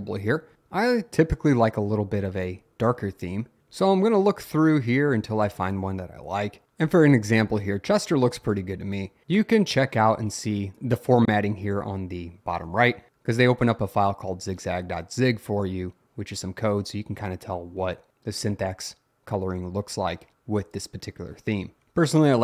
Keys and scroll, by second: 1.4 Up, 2.6 Down, 3.0 Down, 6.2 Up, 6.6 Down, 6.7 Up, 21.8 Up.